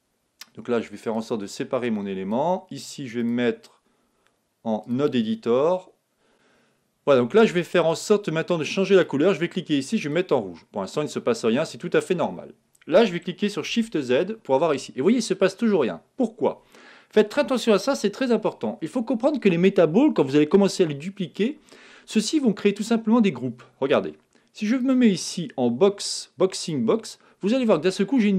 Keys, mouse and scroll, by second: 1.1-2.9 drag, 3.2-4.8 drag, 6.3-7.4 drag, 7.5-10.7 drag, 13.6 shift+z, 17.8 shift+z, 24.7-26.5 drag, 26.6 click, 27.1-28.3 middle drag.